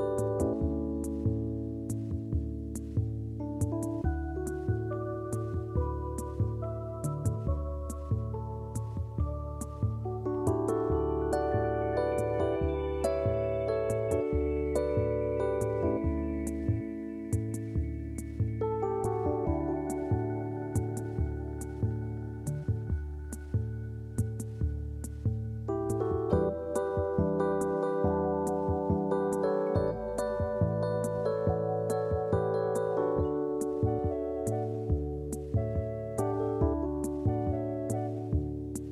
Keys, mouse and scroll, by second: 0.4 click, 1.9 r, 7.0 click, 7.8 shift+click, 8.8 click, 10.1 alt+z, 10.5 click, 11.8 click, 14.8 click, 17.4 click, 18.9 click, 21.5 click, 22.8-24.0 scroll up 1, 24.0-25.0 scroll down 1, 25.0-28.0 middle drag, 28.7-29.9 scroll up 1, 29.9 click, 31.4 r, 33.9-36.5 middle drag, 36.5 click, 36.8 click, 38.4-38.8 scroll down 1, 38.8-38.9 scroll up 1.